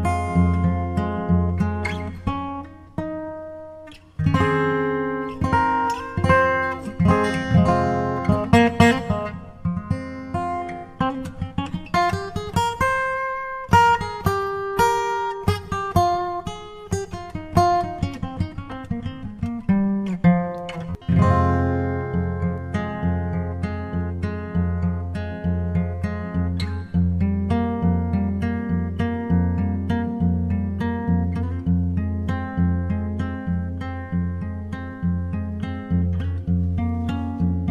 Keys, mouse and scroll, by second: 0.4-2.0 drag, 1.2 shift+d, 1.2 r, 3.4-5.2 drag, 4.3 s, 5.5-7.4 drag, 6.1 g, 9.3-10.9 drag, 10.1-11.9 right drag, 12.7 g, 14.9-16.6 drag, 15.5 g, 17.9-19.6 drag, 18.5 g, 20.7-22.3 drag, 21.4 shift+s, 23.6 shift+d, 25.4-27.0 drag, 26.0 s, 27.1 s, 27.5-29.3 drag, 28.5 shift+d, 30.2-32.0 drag, 30.8 g, 34.6-36.4 drag, 35.8-37.7 right drag.